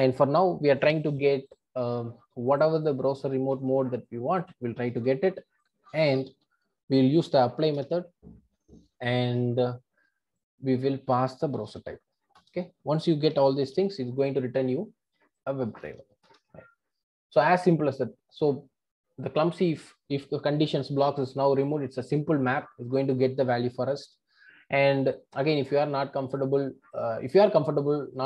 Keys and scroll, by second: 3.5 super+c, 4.8 super+c, 6.3 super+v, 7.8 Return, 12.4 Return, 16.3 Return.